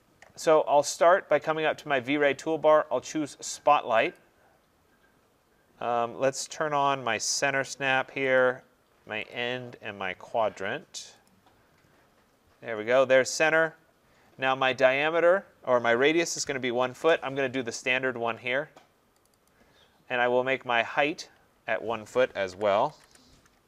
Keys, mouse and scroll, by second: 4.1 click, 8.4 click, 11.3 click, 13.3 click, 16.4-16.9 typing, 16.9 Return, 19.3 click, 19.5 click, 20.3-22.0 scroll, 22.3-23.5 typing.